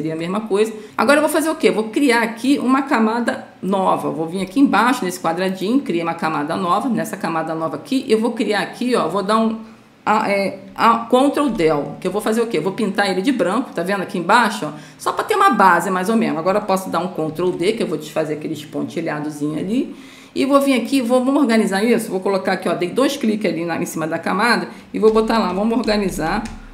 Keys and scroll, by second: 11.8 ctrl+Delete, 17.7 ctrl+d, 24.8-26.7 typing.